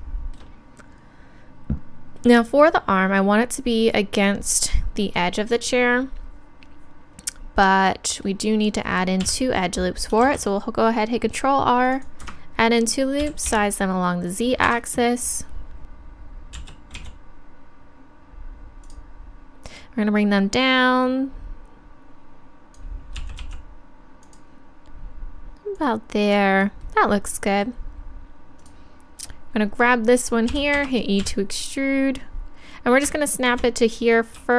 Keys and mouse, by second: 9.2 KP_3, 10.2 ctrl+r, 13.2 s, 15.8 click, 18.9-21.4 drag, 24.3-30.4 drag, 29.2-30.5 right drag, 30.5 e, 31.2 KP_3, 32.1-34.0 drag.